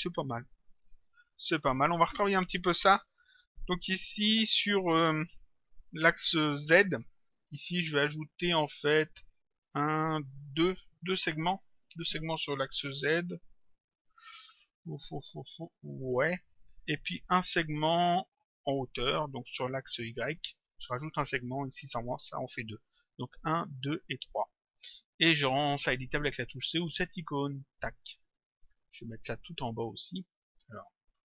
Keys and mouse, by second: 7.6 click, 9.7 click, 20.5 click, 27.7 click.